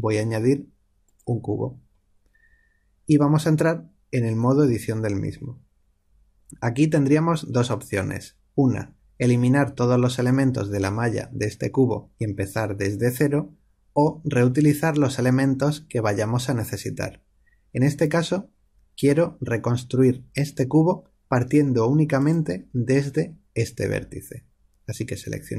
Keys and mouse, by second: 4.6 Tab, 6.4-22.1 middle drag, 22.1 click.